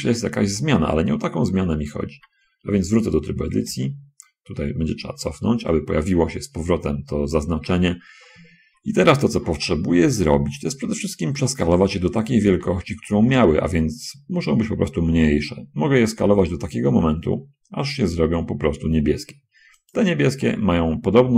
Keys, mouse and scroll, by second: 1.6-2.1 scroll up 2, 2.3 Tab, 3.7 ctrl+z, 5.3 ctrl+z, 12.7 s, 20.1-21.3 shift+middle drag.